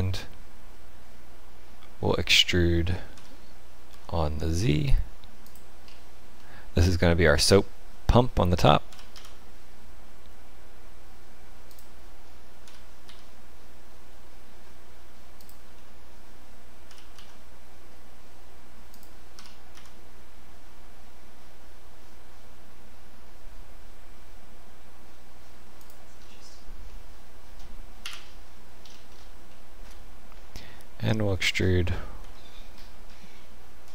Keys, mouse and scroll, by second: 3.1 e, 5.8-6.4 scroll up 5, 6.4 middle click, 8.9 e, 12.6 e, 15.7 middle click, 16.9 e, 19.3 e, 26.1-27.2 scroll down 7, 26.9 middle click, 28.0 KP_1, 28.8-29.5 scroll up 7, 29.5 shift+middle click, 31.4 e.